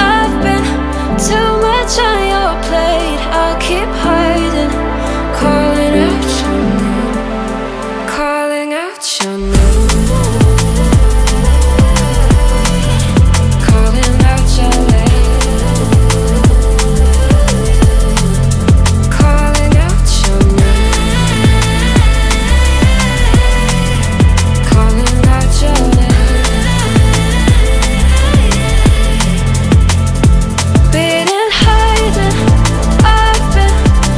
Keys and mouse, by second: 0.1 Return, 0.8 s, 1.0 x, 2.0 click, 2.4 shift+z, 4.2 shift+x, 6.1 shift+x, 7.0 click, 7.2 g, 7.3 z, 8.0 click, 8.2 g, 8.8 click, 9.2 middle click, 9.9 KP_7, 10.8 ctrl+middle drag, 11.2 g, 11.3 y, 11.8 click, 12.2 middle click, 13.0 shift+middle click, 13.6 KP_Decimal, 14.3 middle click, 14.6-16.5 typing, 15.3 click, 15.5 middle click, 17.1 click, 18.6-20.7 middle drag, 21.5 middle click, 23.2 middle click, 24.4 ctrl+middle click, 24.7 middle click, 24.9 middle click, 27.1 ctrl+middle click, 27.4 middle click, 30.0 click, 31.5 ctrl+click, 32.0 click, 32.4-34.1 drag.